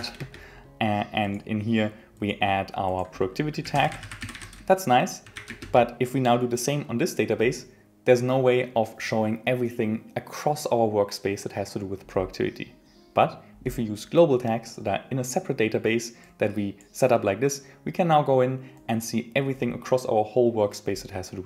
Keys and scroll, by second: 0.2 Return, 5.6 Return.